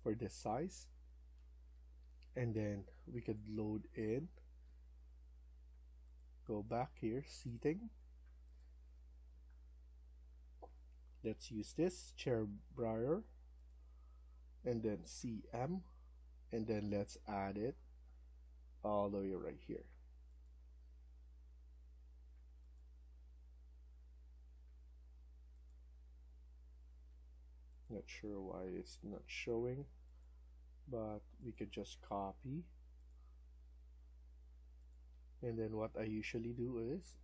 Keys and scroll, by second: 1.6 Escape, 1.6 Up, 1.9 Escape, 9.4 Down, 15.0-15.4 typing, 16.5-17.2 typing, 26.7 Escape, 26.9 Escape, 28.6-29.0 typing, 35.0 Escape, 35.2 Escape, 35.6 Escape.